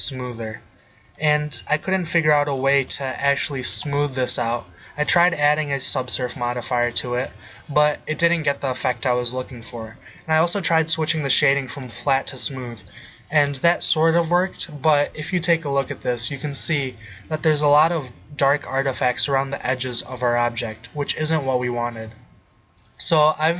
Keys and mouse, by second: 6.5 click.